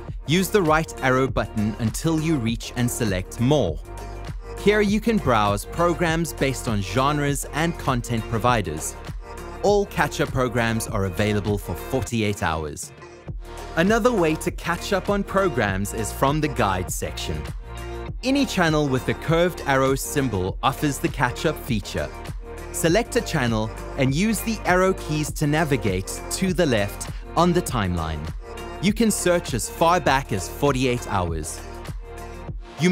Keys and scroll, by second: 0.3 Right, 1.3 Right, 2.2 Right, 3.3 Return, 4.1 Return, 5.0 Return, 23.7 Left, 24.7 Left, 25.6 Left.